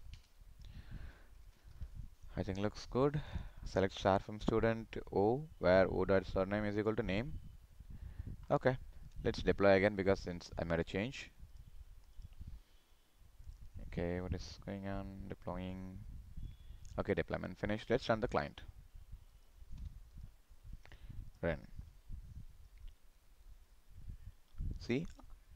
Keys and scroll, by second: 1.1 ctrl+s.